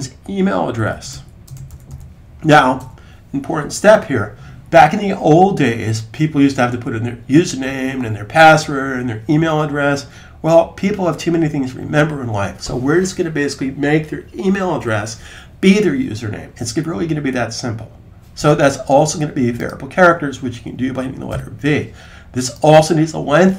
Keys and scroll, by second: 0.6-2.2 typing, 21.2 v.